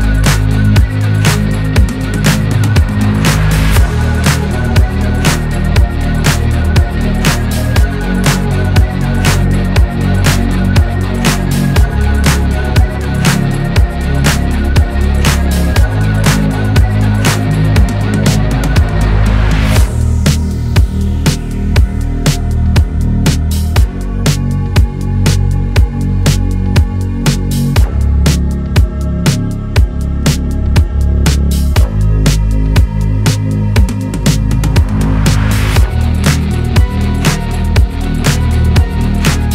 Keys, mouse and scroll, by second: 0.1 scroll down 2, 0.2-5.8 middle drag, 5.8 /, 6.5 scroll down 1, 6.5-7.4 middle drag, 7.4 scroll up 1, 7.7-11.5 middle drag, 11.5 click, 12.1-13.5 scroll down 11, 13.5-16.1 scroll down 1, 16.1 scroll down 1, 16.2-16.9 scroll up 1, 16.9 click, 17.1 middle click, 17.3-17.8 scroll up 1, 17.8 scroll down 2, 18.0-19.7 middle drag, 19.7 scroll up 2, 20.0 scroll down 1, 20.2-20.8 shift+middle drag, 20.8 click, 23.4 click, 23.9 click, 27.6 click, 29.2-29.8 scroll up 1, 29.8 click, 30.0-31.5 middle drag, 31.5-32.1 drag, 33.3-33.7 drag, 33.8 scroll down 3, 34.1 click, 34.3-35.2 middle drag, 35.2-36.2 drag, 36.2 scroll down 3, 36.3-36.8 middle drag, 36.8-37.2 scroll up 2, 37.2 middle drag, 39.3 scroll down 1.